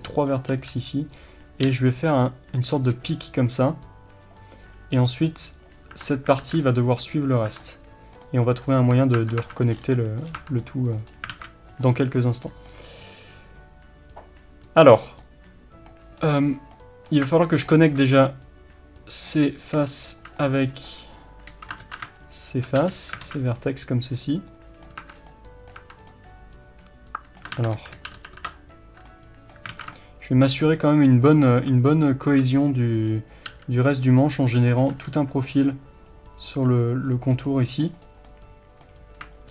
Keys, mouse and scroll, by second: 0.6 e, 2.5 click, 3.0 e, 6.0 Tab, 6.1 scroll down 1, 6.5 alt+z, 6.7-17.1 middle drag, 7.5 Tab, 8.9 Tab, 9.8 scroll down 1, 10.3 scroll up 1, 10.4 Tab, 11.0-11.4 scroll up 1, 11.4 alt+a, 14.9-15.3 scroll down 1, 16.2 scroll up 1, 17.1 click, 17.7-20.2 shift+middle drag, 20.2 shift+click, 20.4-22.2 middle drag, 20.8 scroll up 1, 21.9 ctrl+z, 22.2 shift+click, 22.8 f, 23.3 alt+a, 23.4 scroll down 1, 23.6-33.0 middle drag, 25.1 Tab, 25.2 scroll down 1, 25.8 Tab, 28.1 ctrl+z, 29.8 alt+a, 30.7 scroll up 1, 33.0 click, 33.6 f, 34.1 right click, 34.7 click, 35.0 f, 36.4 click, 36.6 f, 37.2 click, 37.5-39.5 middle drag, 38.1 scroll up 1.